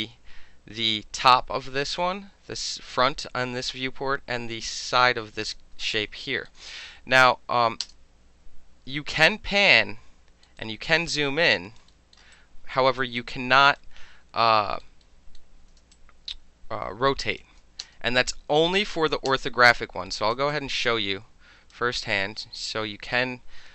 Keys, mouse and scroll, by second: 6.2 alt+middle click, 7.8 space, 8.1-9.1 drag, 10.4 alt+middle click, 10.5 alt+click, 11.0-11.4 alt+middle drag, 11.4-11.7 alt+drag, 11.7 alt+middle click, 12.1 alt+middle drag, 12.3-12.8 alt+right drag, 12.8 alt+click, 13.0 alt+middle click, 13.1 alt+click, 13.7 alt+middle click, 14.8 alt+click, 15.3-17.3 alt+drag, 17.8 space, 19.2 space, 20.0 alt+middle click, 20.5-21.7 alt+drag, 21.9 alt+middle click, 21.9-23.7 alt+right drag.